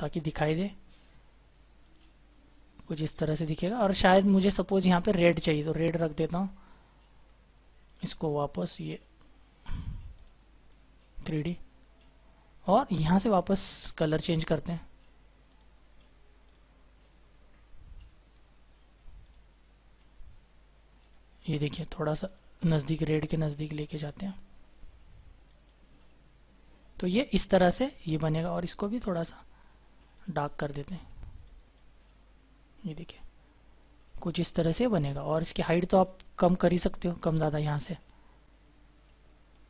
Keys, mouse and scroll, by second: 6.2-6.7 scroll down 1, 7.2 scroll up 1.